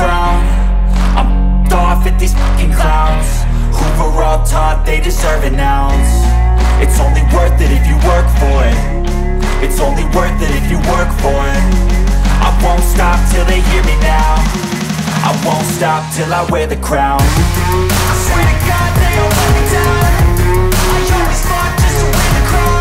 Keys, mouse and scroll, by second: 3.9 click, 8.0 typing, 8.4-11.5 drag, 12.7 click, 16.3-22.6 drag, 22.6 space.